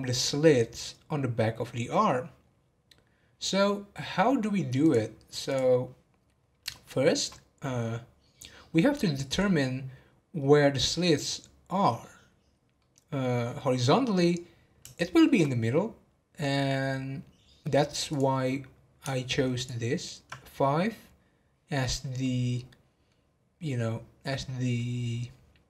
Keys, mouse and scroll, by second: 3.5-4.8 middle drag, 4.8-6.2 drag, 6.2 scroll down 1, 6.8-8.3 shift+middle drag, 8.3-9.4 scroll down 1, 12.7-18.0 middle drag, 18.1 click, 19.5 ctrl+click, 22.2-25.6 middle drag.